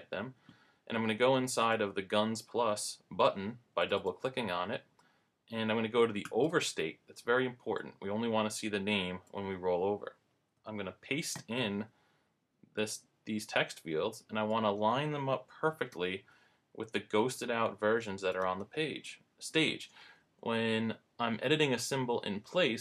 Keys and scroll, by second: 11.3 super+v, 15.9 super+=, 19.5 shift+Left, 20.0 Up.